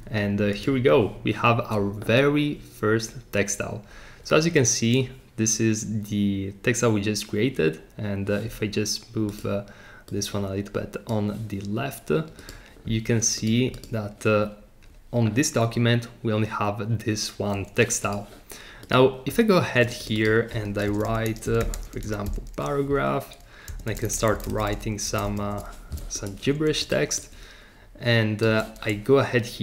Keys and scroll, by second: 20.6-26.0 typing.